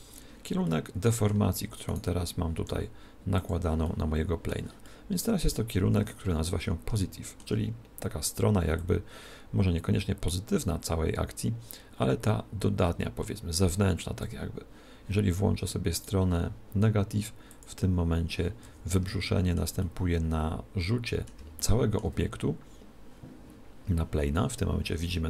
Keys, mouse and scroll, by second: 0.7-2.3 middle drag, 2.0 right click, 2.7 r, 3.5 click, 3.8 r, 4.0-6.8 middle drag, 7.0-8.7 middle drag, 8.8 click, 16.1 right click, 17.6 click, 19.1-23.4 middle drag.